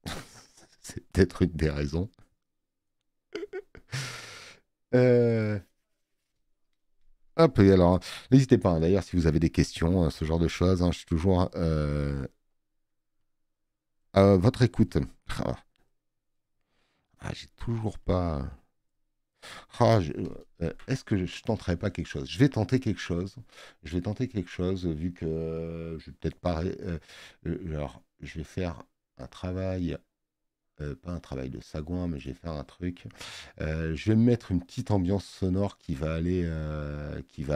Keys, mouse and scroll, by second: 7.4 space, 10.8 space, 11.0 click, 26.2 click, 31.1 middle click.